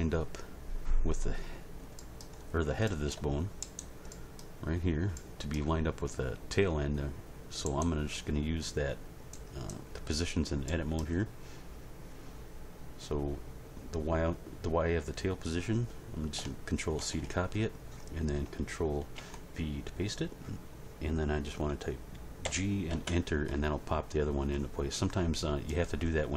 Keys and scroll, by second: 17.0 ctrl+c, 19.1 ctrl+v, 22.4 g, 22.9 Return.